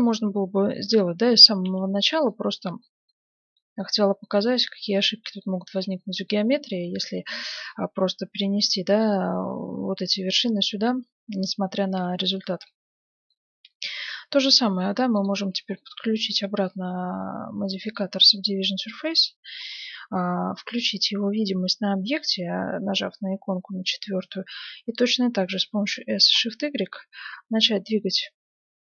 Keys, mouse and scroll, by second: 0.0-10.1 middle drag, 10.4-11.8 middle drag, 12.0-14.4 middle drag, 15.1-16.9 drag, 15.7-17.5 middle drag, 17.8-19.5 drag, 18.7-20.4 middle drag, 23.6-25.3 middle drag, 25.7 s.